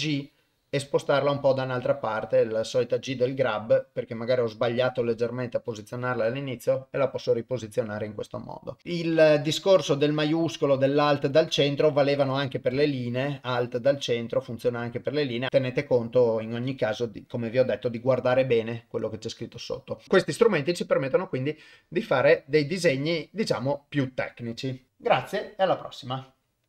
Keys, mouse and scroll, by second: 11.3 click, 12.2-15.1 drag.